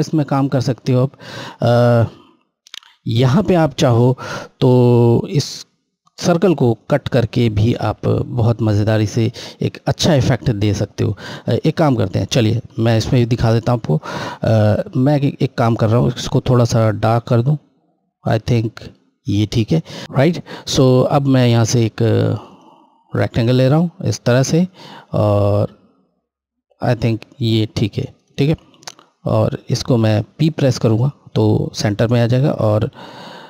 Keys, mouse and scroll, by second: 9.9 click, 14.0 click, 14.4 click, 20.0 click, 29.8 click, 31.4 p, 32.9 click.